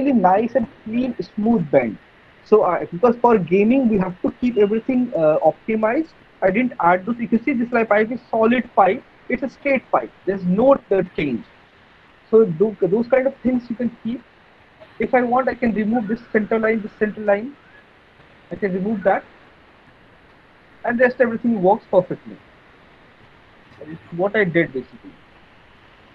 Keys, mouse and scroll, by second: 13.4 middle click, 13.7 middle click, 14.6 alt+middle click, 15.0 middle click, 15.2 middle click, 15.3 alt+middle click, 17.6 middle click, 17.8 middle click, 18.8 alt+middle click, 19.0 alt+middle click, 19.2 middle click, 19.5 middle click, 20.7 alt+middle click, 22.1 alt+middle click, 22.5 middle click, 22.7 middle click, 23.3 right click, 24.4 click, 25.8 middle click.